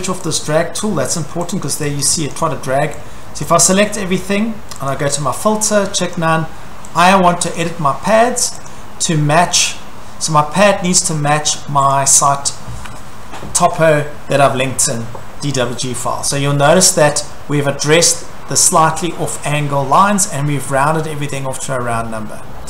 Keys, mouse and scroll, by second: 0.3 click, 1.7 click, 2.0 click, 2.3 click, 3.5 click, 4.9 click, 6.2 click, 7.0 click, 7.6 click, 8.7 click, 9.6 scroll, 10.9 scroll, 11.9 click, 17.1-18.0 scroll, 18.0-19.0 scroll, 19.3-19.7 scroll, 21.8 scroll, 22.0 middle click, 22.1 middle click, 22.2 middle click, 22.5 middle click.